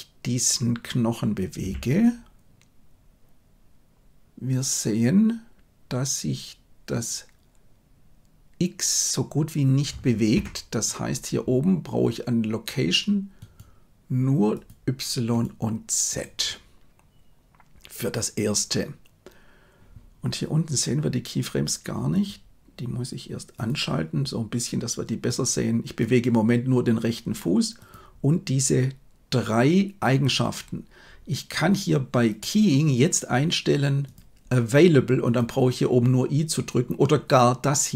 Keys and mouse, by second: 1.5 g, 13.4-14.6 right drag, 15.3 right click, 25.2 click, 32.4-35.6 drag.